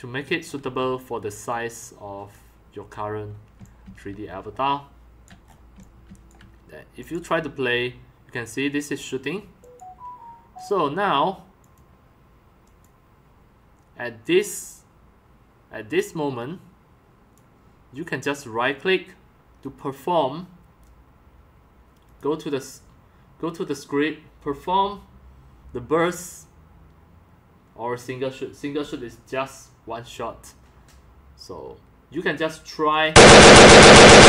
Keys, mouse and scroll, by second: 1.5 click, 3.5 x, 3.6-5.2 drag, 3.8 c, 5.7 x, 6.2 c, 9.6 click, 14.2 click, 15.7 click, 18.2 click, 19.6 click, 22.0 click, 32.9 click.